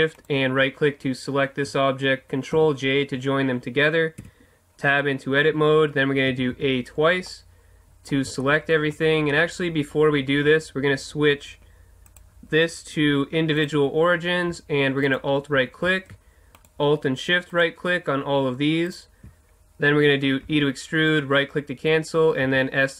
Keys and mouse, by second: 0.2-2.0 right drag, 2.6 ctrl+j, 4.2 Tab, 6.3 a, 6.5 a, 7.6 middle click, 10.0-12.0 middle drag, 12.0-14.0 drag, 15.0-20.7 right drag, 20.5 e, 21.2-22.9 right drag, 22.4 s.